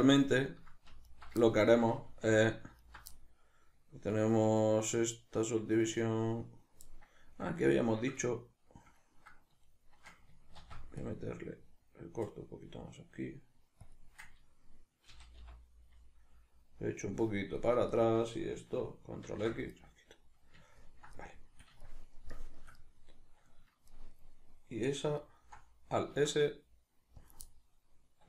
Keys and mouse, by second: 1.1 alt+right click, 1.4-2.8 ctrl+middle drag, 2.3 2, 2.8 alt+right click, 2.9-10.6 middle drag, 10.6 ctrl+r, 13.9 click, 15.1 g, 17.6 click, 17.9 alt+right click, 19.2 ctrl+x, 19.7-25.2 middle drag, 25.2 alt+right click, 26.1 alt+s, 27.3 click, 27.5-28.2 middle drag.